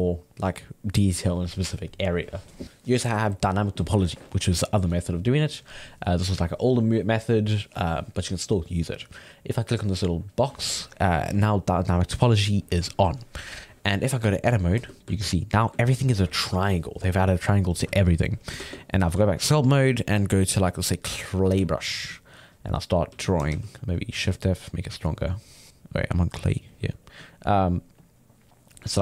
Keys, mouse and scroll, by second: 9.6-12.6 drag, 15.0-18.5 ctrl+middle drag, 18.5 ctrl+Tab, 19.2-20.5 ctrl+middle drag, 20.5 click, 21.5 f, 22.1 click, 23.1 f, 24.3-26.9 drag, 26.9 middle click, 27.2-29.0 drag.